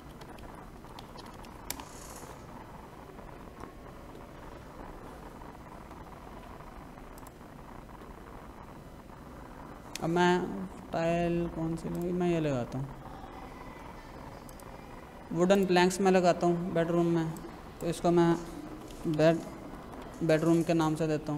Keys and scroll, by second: 0.0-1.4 typing, 1.7 Return, 18.4-20.0 typing.